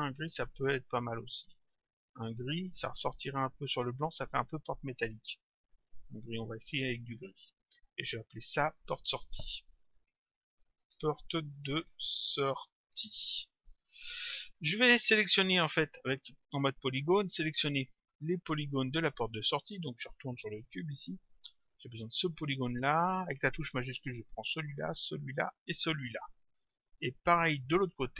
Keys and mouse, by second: 4.9 click, 7.1 click, 8.7 click, 9.9-13.5 typing, 15.8 click, 17.3 click, 20.6 click, 21.8 click, 23.7 click, 27.0 click.